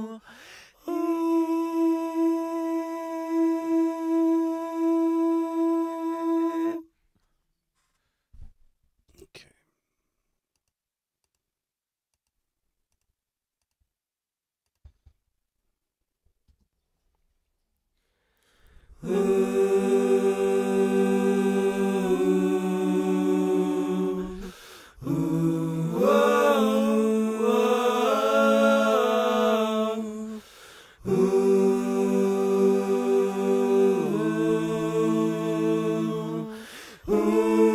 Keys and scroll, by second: 9.0 space, 16.4 space.